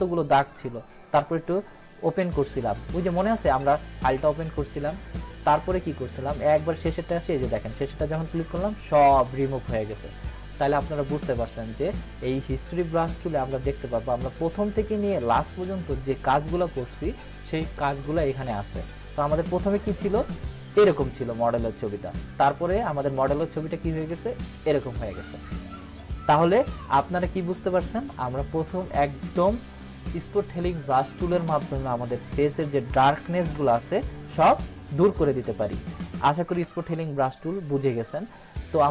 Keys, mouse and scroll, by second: 1.2 click, 5.4-6.7 drag, 12.7 click, 12.8-13.7 drag, 19.5-20.2 drag, 33.1 click, 33.5 ctrl+=, 35.3 scroll up 1, 36.7 ctrl+-.